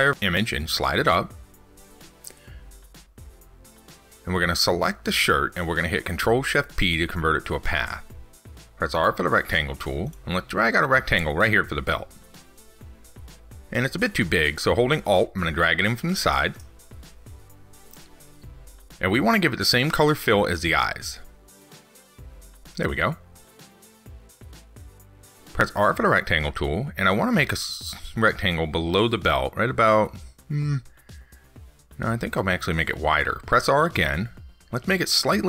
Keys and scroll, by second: 6.5 ctrl+shift+p.